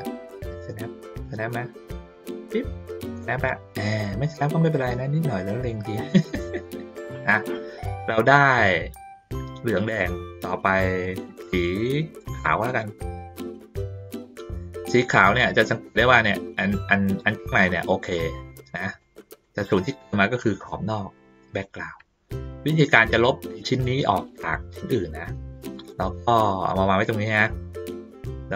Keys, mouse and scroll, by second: 4.2 ctrl+middle click, 5.5 ctrl+middle click, 7.2 ctrl+middle click, 7.9 click, 8.3 middle click, 9.0 ctrl+middle click, 10.0-11.0 middle drag, 12.4 click, 13.4-15.2 drag, 15.6 ctrl+middle click, 17.2 ctrl+middle click, 17.4 ctrl+middle click, 17.8 ctrl+middle click, 18.4 ctrl+middle click, 19.0 middle click, 20.0 middle click, 22.5 ctrl+middle click, 23.1 ctrl+middle click, 26.1-27.4 drag, 27.7 middle click, 28.4-28.5 ctrl+scroll up 1.